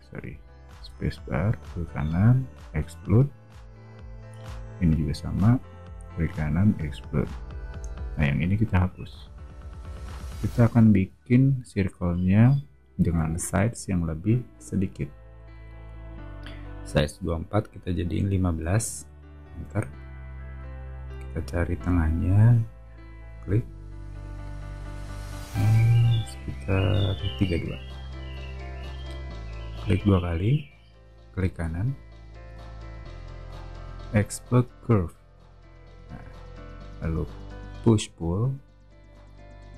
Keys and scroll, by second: 0.7 space, 9.0 BackSpace, 11.0 o, 15.5 c, 18.5 1, 19.0 5, 19.5 Return, 27.4-28.8 typing, 37.1 p.